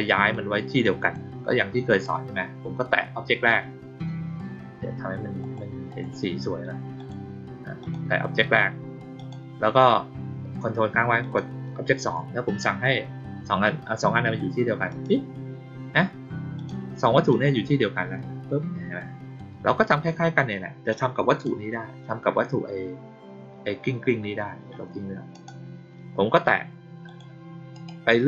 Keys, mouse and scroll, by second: 0.2 click, 1.8 click, 5.3 click, 5.8 click, 6.9 click, 7.7 click, 9.1 click, 11.1 ctrl+click, 14.8 click, 16.5 click, 17.2-19.3 drag, 20.8-21.4 drag, 25.2 click, 27.0 click, 27.7 right click.